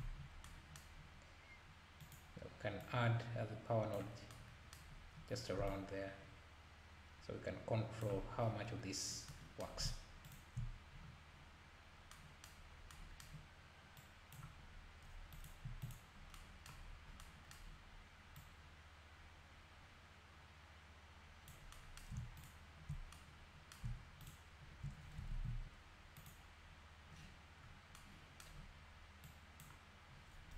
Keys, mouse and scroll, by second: 0.2 scroll down 1, 2.0 click, 2.8-4.4 drag, 5.0-5.5 scroll up 2, 5.7-10.4 shift+drag, 11.9 scroll down 1, 12.7 scroll up 1, 14.0-16.3 drag, 16.9-17.2 scroll up 1, 18.3-21.4 drag, 22.5 ctrl+shift+click, 24.3 ctrl+shift+click, 25.4 ctrl+s, 26.2-27.9 drag, 29.3 click.